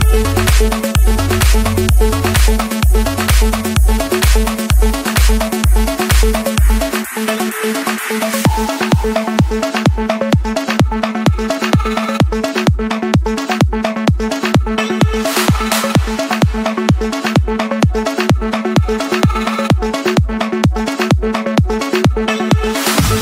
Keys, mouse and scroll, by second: 0.2 click, 3.0 click, 3.9 scroll, 5.8 click, 7.7 click, 9.0-9.8 scroll, 9.8 scroll down 1, 10.4-10.8 scroll up 2, 12.6 c, 13.5 Return, 16.6 scroll up 1, 17.0-18.0 scroll, 19.3 click, 20.8 click, 21.1 scroll, 22.0 Escape.